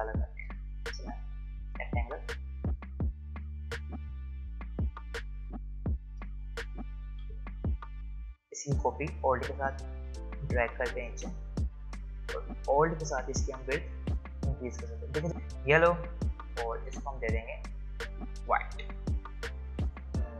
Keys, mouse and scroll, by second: 0.5 right click, 0.5 right click, 1.7-7.2 drag, 7.2 v, 9.2-14.1 alt+drag, 14.1 alt+click, 15.6 click.